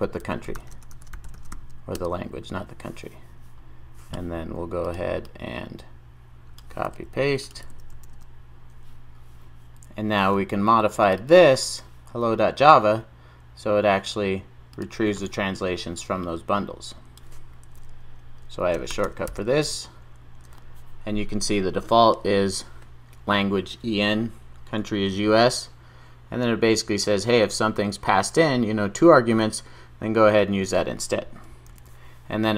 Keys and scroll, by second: 7.7 super+v, 19.7 Return, 31.7 super+s.